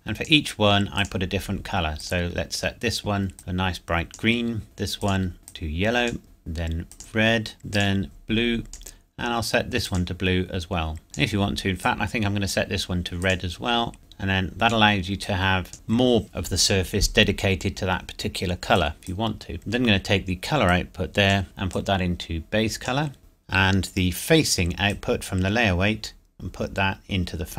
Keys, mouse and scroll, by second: 18.9 click, 19.6 scroll up 1, 20.7 click, 25.2 click.